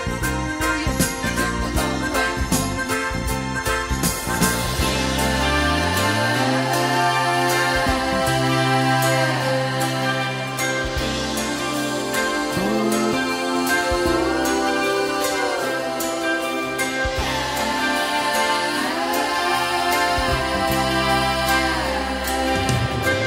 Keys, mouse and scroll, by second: 0.9 alt+right click, 1.2 alt+middle click, 1.7 middle click, 2.2-7.1 right drag, 3.9 e, 6.6 s, 7.1 middle click, 7.7-9.8 right drag, 9.8 middle click, 10.7-12.7 right drag, 12.7-17.6 middle drag, 17.6 click, 19.2-23.2 middle drag.